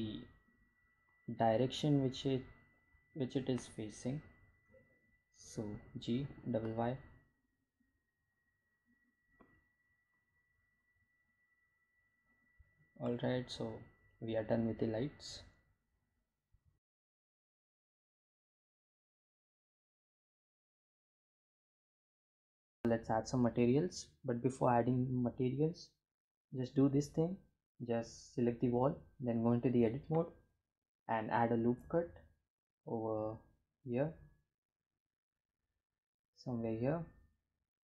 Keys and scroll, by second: 0.2 g, 0.6 y, 11.6 g, 12.2 y, 22.9 Tab, 31.6 Tab, 33.3 ctrl+r.